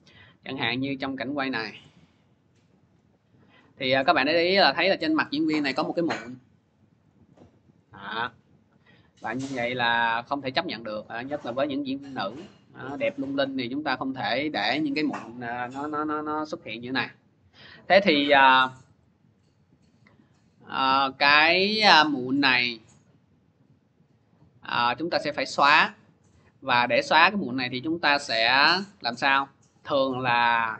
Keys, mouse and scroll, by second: 0.4 click, 1.6-2.8 drag, 2.1 middle click, 2.8 scroll, 3.7 scroll, 5.1 scroll, 6.0 scroll, 6.6 scroll, 6.9 click, 7.6 scroll, 9.1 scroll, 10.2 click, 10.8 scroll, 12.8 click, 13.9 middle click, 16.7 click, 19.2 scroll, 20.4 middle click, 23.1-24.3 middle drag, 26.5 click, 28.5 click, 29.2-29.5 scroll, 29.8-30.7 scroll.